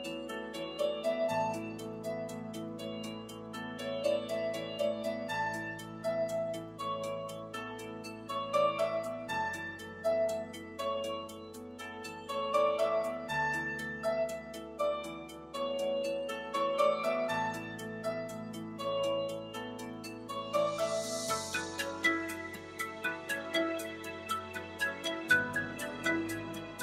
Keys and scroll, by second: 22.1 3.